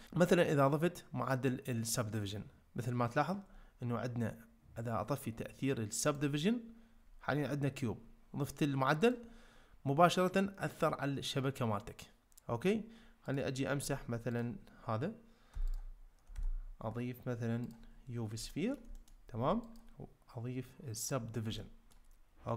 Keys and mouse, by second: 6.0 click, 9.0 click, 14.3-16.2 drag, 16.4 shift+a, 18.5 ctrl+middle click, 19.0 middle click, 19.7-21.1 drag, 21.6 ctrl+middle click.